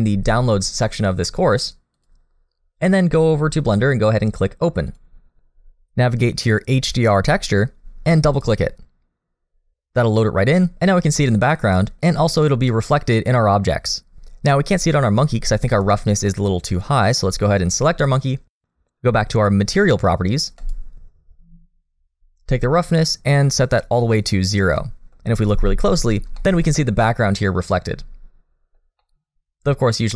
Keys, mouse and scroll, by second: 4.9 click, 10.0 middle click, 12.4 scroll up 1, 12.7 middle click, 14.4 middle click, 14.7-15.0 scroll up 2, 15.0 middle click, 16.3 click, 16.4 middle click, 20.6 click, 23.3 click, 24.8 middle click, 25.3-26.3 scroll up 1, 26.4 shift+middle click, 26.8 middle click, 29.0 middle click.